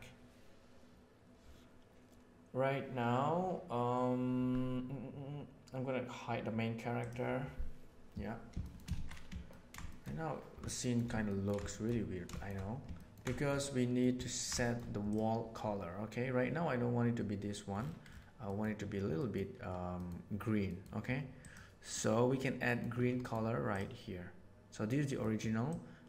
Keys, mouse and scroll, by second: 6.9 click, 8.5 shift+middle click, 8.9 alt+a, 9.4 middle click, 9.8 middle click, 11.2 ctrl+middle click, 11.6 shift+middle click, 12.2 shift+middle click, 12.9 ctrl+middle click, 13.3 shift+middle click, 13.5 middle click, 14.2 ctrl+middle click, 14.6 shift+middle click, 18.4 middle click, 19.2 middle click, 20.0 middle click, 20.7 middle click, 21.4 middle click, 22.0 middle click, 22.7 middle click, 23.2 middle click, 25.1 middle click, 25.6 click.